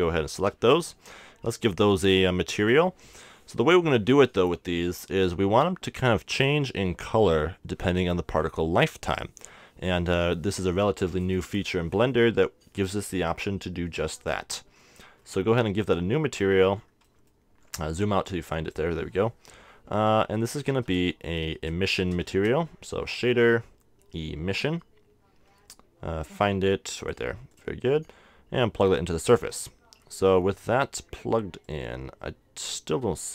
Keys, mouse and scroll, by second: 0.3 KP_0, 2.0-3.7 drag, 14.1-15.9 drag, 15.2-16.4 middle drag, 18.3-20.0 drag, 20.5-22.2 drag, 20.7 x, 21.1 q, 22.3 shift+a, 27.6-30.6 drag, 31.6-33.3 drag.